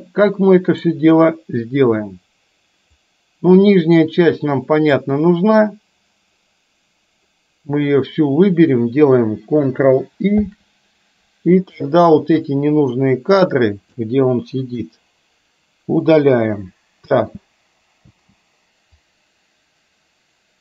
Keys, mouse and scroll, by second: 3.1-5.2 drag, 10.4 ctrl+i, 12.6-14.2 drag, 14.7 Delete, 17.2 space, 18.2 space, 19.1-20.6 drag.